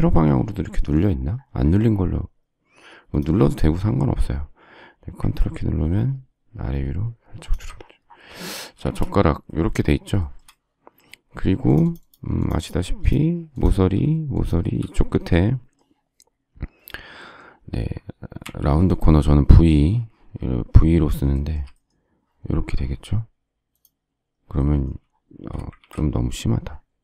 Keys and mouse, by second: 8.7 ctrl+space, 8.8 Escape, 18.4 v, 25.8 ctrl+z.